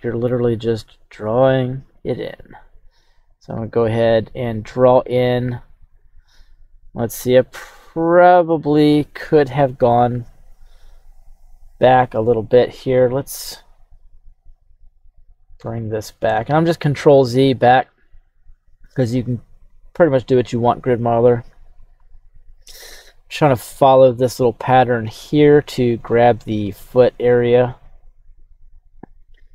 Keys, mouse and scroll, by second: 12.2 right click, 13.1 ctrl+z, 13.6 ctrl+z, 19.0 click, 20.2 click, 21.7-22.8 drag, 24.1 click, 26.4 click, 27.5 click, 28.9 click.